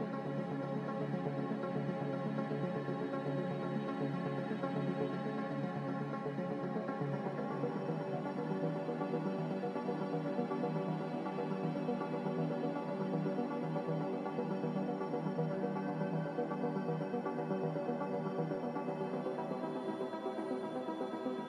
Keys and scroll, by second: 9.6-10.5 typing, 11.7 2.